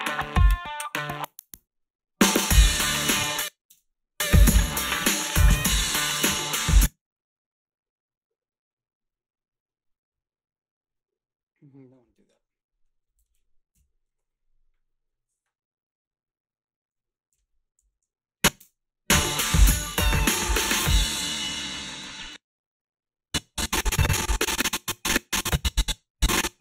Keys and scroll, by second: 3.2 space, 3.7 space, 6.5 space, 13.8 Home, 17.4 h, 17.8 a, 18.6 space, 22.1 space.